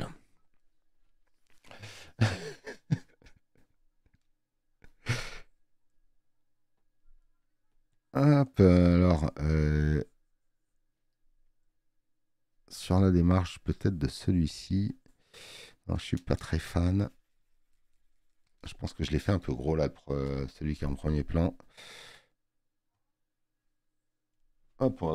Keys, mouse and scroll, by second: 5.4 click, 5.4 space, 21.3 click.